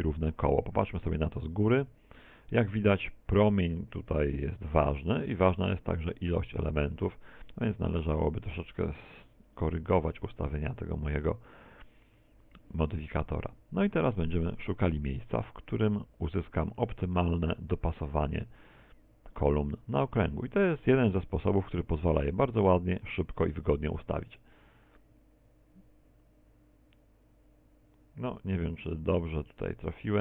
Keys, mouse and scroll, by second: 0.0 z, 1.8 r, 7.8 click, 7.8 right click, 9.2 click, 9.5 click, 9.7 click, 14.8 right click, 15.5 g.